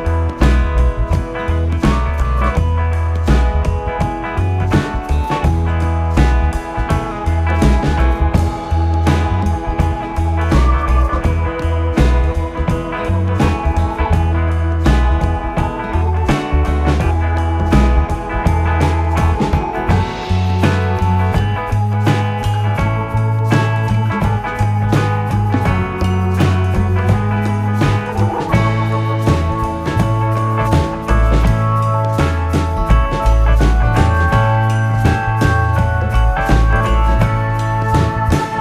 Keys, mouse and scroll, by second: 1.4 shift+a, 5.2-10.8 drag, 10.8 s, 13.2 g, 16.7 s, 20.3 r, 31.2-31.8 scroll up 3, 32.5 shift+middle click, 33.3-35.7 scroll up 2, 35.7 r.